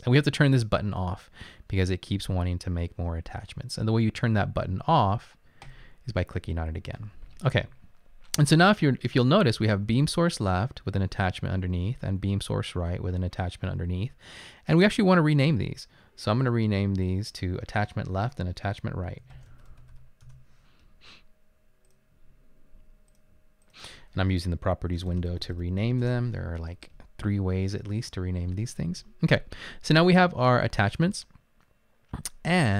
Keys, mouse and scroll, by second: 19.2-20.5 typing, 21.9 typing, 25.0-26.2 typing, 31.2 typing.